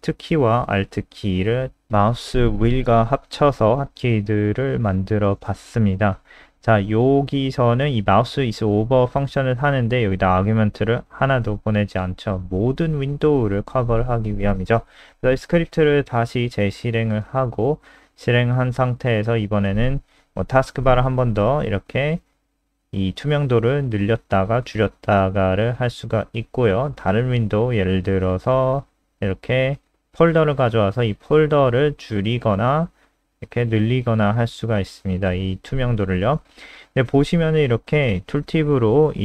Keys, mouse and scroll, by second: 2.3 Home, 2.8 shift+Right, 6.1 click, 9.2 Right, 9.3 Left, 13.2 click, 13.7 ctrl+alt+r, 14.7 click, 28.3 F3, 29.5 click.